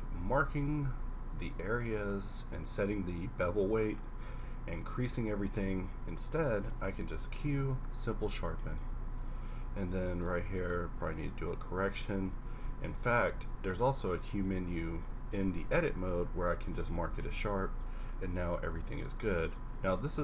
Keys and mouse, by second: 0.3 Tab, 0.8 a, 5.7 Tab, 6.6 q, 9.0 Tab, 12.5 ctrl+z, 14.4 q, 17.1 Tab, 18.9-20.2 middle drag.